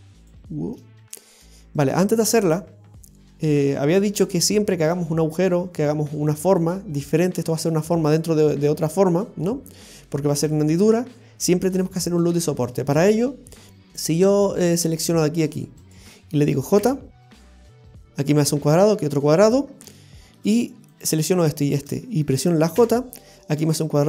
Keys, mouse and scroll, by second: 0.1 scroll up 1, 0.2 click, 0.2 right click, 3.3-3.8 scroll down 2, 3.6 middle click, 10.4-10.9 scroll up 5, 11.3 scroll down 1, 11.8 scroll down 1, 12.0 shift+middle click, 14.1 click, 15.3 right click, 15.8 shift+right click, 16.9 j, 19.7 scroll down 2, 20.0 shift+middle click, 20.9 right click, 21.6 shift+right click, 22.8 i, 23.5 l.